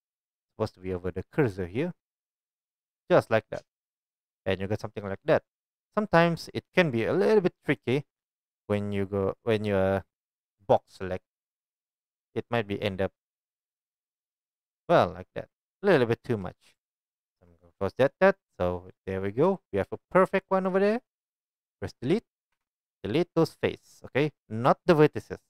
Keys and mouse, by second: 5.8-8.4 middle drag, 13.3-25.4 shift+middle drag, 17.0 ctrl+z, 17.2 ctrl+z.